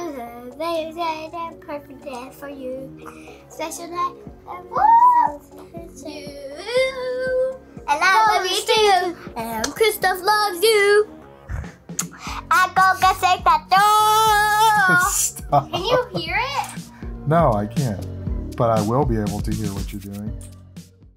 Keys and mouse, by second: 0.1 space, 0.1 click, 0.3 click, 0.4 ctrl+z, 0.5 click, 0.9 space, 1.0 click, 1.5 click, 1.6 click, 2.1 click, 2.4 click, 2.9 click, 3.2 ctrl+alt+click, 3.7 click, 4.2 click, 4.6 click, 4.7 ctrl+z, 4.8 click, 5.0 ctrl+z, 5.1 click, 5.4 space, 5.4 click, 5.6 click, 5.9 click, 6.6 click, 7.0 click, 7.2 click, 7.3 click, 7.6 click, 7.9 click, 8.3 click, 8.6 click, 9.1 click, 9.4 click, 9.7 click, 10.0 click, 10.2 click, 10.6 click, 11.4 click, 11.4 ctrl+-, 11.5 ctrl+space, 11.6 click, 11.8 click, 12.3 click, 12.7 click, 14.1 click, 14.6 click, 15.2 click, 15.7 click, 16.2 click, 16.4 click, 16.9 ctrl+z, 17.1 click, 17.5 click, 17.6 ctrl+z, 17.7 click, 18.8 click, 19.3 click, 19.8 click, 19.8 space, 19.9 ctrl+=, 20.0 click, 20.0 space.